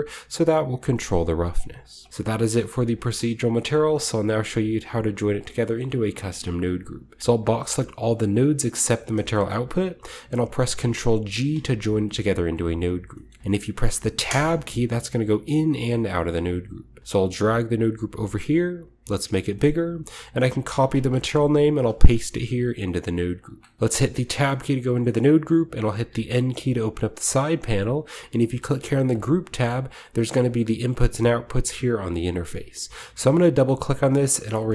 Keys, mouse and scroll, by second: 1.1-3.5 shift+middle drag, 1.4-2.9 shift+scroll down 2, 3.6-5.3 middle drag, 4.5 scroll down 1, 5.7-6.2 shift+middle drag, 6.2 drag, 7.2-8.8 drag, 10.0-11.1 ctrl+middle drag, 11.2 ctrl+g, 12.1 middle click, 12.2-14.2 scroll up 1, 12.7-14.2 middle drag, 14.5 scroll up 1, 15.4 Tab, 15.6-16.8 scroll up 1, 15.8 Tab, 16.2-17.0 middle drag, 16.8-17.9 scroll up 1, 17.1-20.2 drag, 19.5 middle click, 19.5-20.2 scroll up 1, 20.2-21.1 scroll up 1, 20.6 ctrl+c, 21.1 scroll down 1, 21.2-21.7 scroll up 1, 21.8 ctrl+click, 21.8 ctrl+v, 22.1 click, 23.2 click, 23.8-25.1 middle drag, 23.8-24.8 scroll up 1, 24.2 Tab, 24.8 scroll down 2, 25.0 scroll up 1, 25.2-26.3 middle drag, 26.0 n, 26.3-26.9 scroll down 1, 26.9-28.8 drag, 29.0-30.6 drag, 33.2 click, 33.4 click, 34.5-34.7 typing.